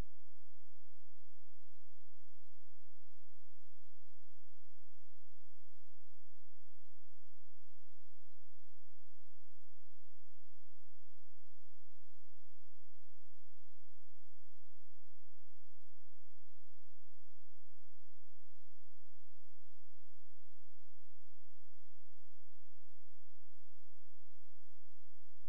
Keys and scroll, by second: 24.6 space.